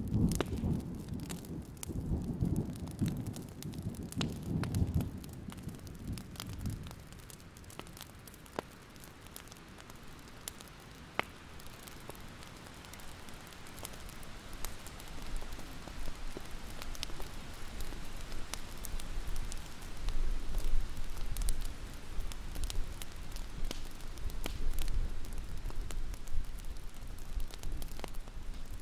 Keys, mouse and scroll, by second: 0.1 alt+click, 0.7 click, 1.3 ctrl+z, 2.0 alt+click, 2.5-6.3 drag, 7.3-7.7 scroll down 1, 7.8 alt+scroll up 1, 8.2 alt+scroll down 1, 8.4-8.8 scroll up 1, 8.9 alt+scroll up 1, 9.8 click, 9.9-10.5 alt+scroll up 1, 10.5-12.9 drag, 12.9 alt+scroll down 1, 13.2 ctrl+z, 13.7 click, 14.2-14.7 alt+scroll down 1, 14.7-15.2 scroll down 1, 15.2 click, 15.7 alt+scroll down 1, 16.9 scroll up 1, 17.2-18.2 scroll down 1, 18.2-19.5 scroll up 1, 19.5 click, 19.7-20.2 scroll up 2, 21.4-21.8 scroll up 1, 22.8 click, 27.5 ctrl+z, 27.7-28.2 scroll down 1, 28.2-28.7 scroll up 1.